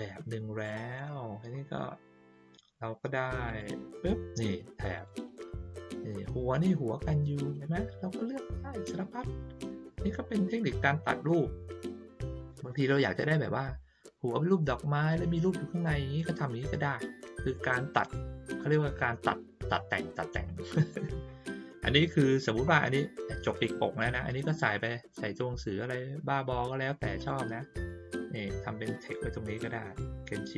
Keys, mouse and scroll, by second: 0.9 click, 3.4 click, 4.9 click, 5.8-6.2 ctrl+scroll down 2, 8.3-9.2 ctrl+scroll up 2, 9.8 ctrl+scroll down 2, 17.5 middle click, 20.9 middle click, 22.1 middle click, 27.1 click, 27.8-30.5 drag.